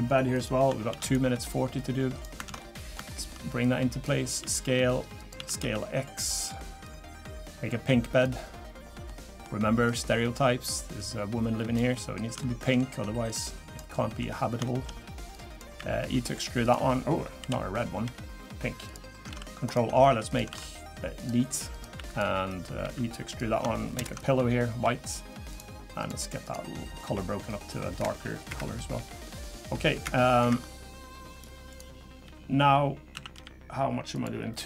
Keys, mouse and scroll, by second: 0.9 shift+d, 1.7 click, 2.5 ctrl+z, 2.6 middle click, 3.1 shift+middle click, 3.6 click, 4.4 s, 5.4 s, 6.8 click, 9.1 middle click, 9.9 click, 11.0 click, 11.9 middle click, 12.2 scroll up 1, 12.4 shift+middle click, 13.3 click, 13.9 middle click, 14.3 scroll down 1, 14.6 shift+middle click, 15.3 click, 15.8 e, 17.4 l, 18.0 g, 19.3 ctrl+r, 20.5 ctrl+r, 21.9 3, 22.1 click, 22.8 e, 24.0 ctrl+KP_Add, 24.8 g, 26.0 click, 26.4 click, 27.1 h, 28.5 Escape, 28.9 g, 30.0 Escape, 30.4 Escape, 31.7 click, 32.2 g, 33.1 a, 33.3 g, 34.5 scroll down 2.